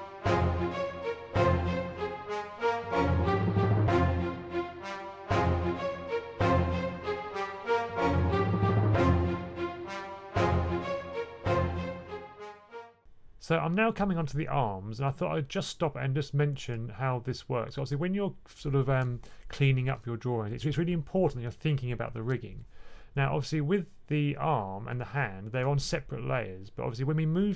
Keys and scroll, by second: 2.9 1, 4.6 1, 5.4 1, 6.4 1, 9.4-10.5 typing, 12.7-13.5 typing.